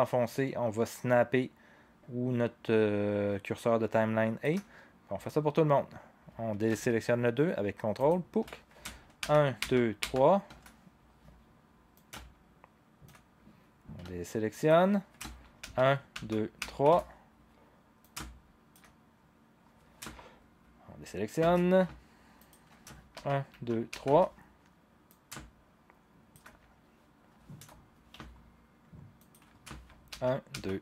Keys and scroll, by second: 9.2 shift+Page_Down, 9.6 shift+Page_Down, 10.0 shift+Page_Down, 15.6 shift+Page_Down, 16.1 shift+Page_Down, 16.6 shift+Page_Down, 23.1 shift+Page_Down, 23.5 shift+Page_Down, 23.9 shift+Page_Down, 30.1 shift+Page_Down, 30.5 shift+Page_Down.